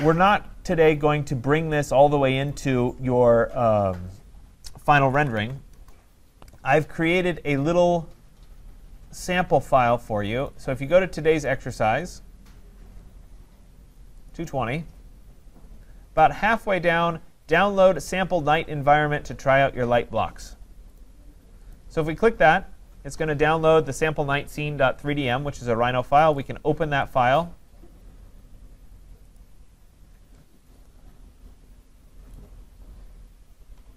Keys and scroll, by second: 5.7 Return.